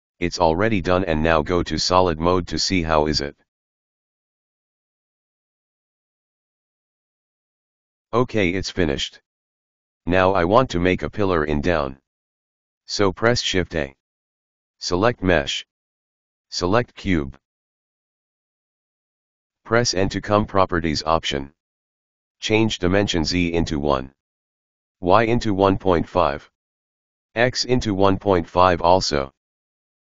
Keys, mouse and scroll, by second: 3.1 click, 4.3 right click, 6.7 click, 7.8 click, 12.4-13.2 scroll up 3, 15.0 shift+a, 19.3 Right, 20.2 n, 21.8-23.5 drag, 25.7 KP_1, 26.0 click, 26.9 click, 27.8-28.9 drag, 28.9-30.1 middle drag.